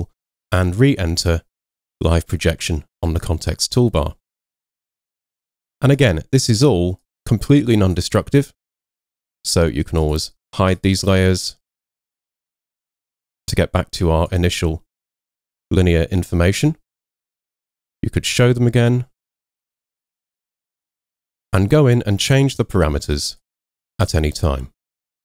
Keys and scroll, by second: 0.1 v.